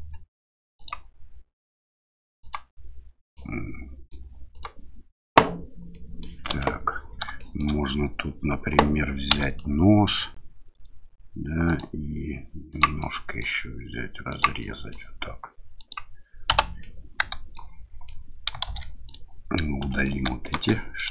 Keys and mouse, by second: 0.7 click, 2.4 click, 3.3 middle click, 4.5 click, 5.9 middle click, 6.6 KP_7, 7.4 shift+middle click, 9.3 k, 13.0-16.5 middle drag, 16.8 middle click, 18.0 middle click, 18.7 shift+z, 19.1 click, 19.8 3, 20.0 click, 20.4 shift+click, 20.7 middle click.